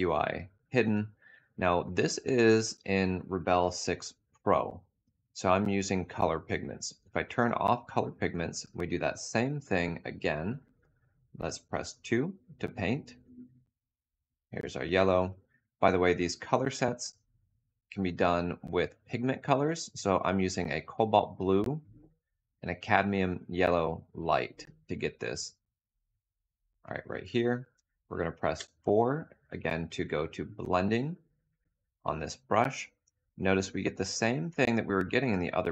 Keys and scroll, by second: 11.4 2, 28.2 4.